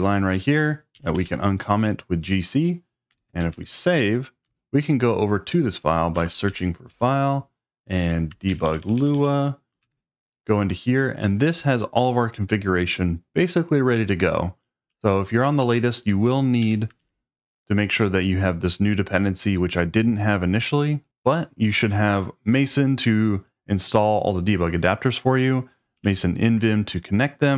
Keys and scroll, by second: 0.0-1.6 typing, 2.9-4.4 typing, 6.2 space, 6.5 s, 6.9 f, 8.5 Up, 8.6 Up, 8.8 Up, 8.9 Up, 9.1 Up, 9.8 Return, 14.9-17.5 typing, 19.4 Escape, 21.0 j, 25.9 j, 26.9 j.